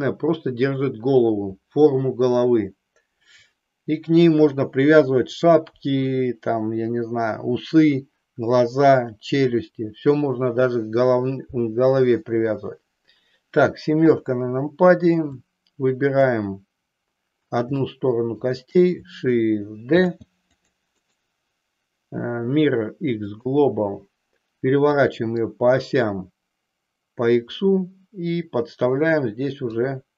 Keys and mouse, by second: 14.0 KP_7, 15.4 click, 17.8 shift+middle click, 19.9 shift+d, 20.6 click, 22.9-25.0 right drag, 25.0-29.7 drag.